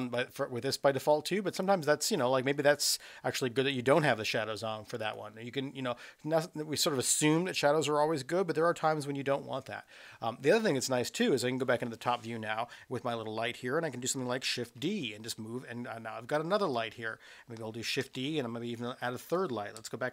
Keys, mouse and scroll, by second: 0.0 click, 1.1 click, 1.5 click, 5.0 click, 11.4 KP_7, 14.7 shift+d, 18.1 shift+d, 19.7 KP_0.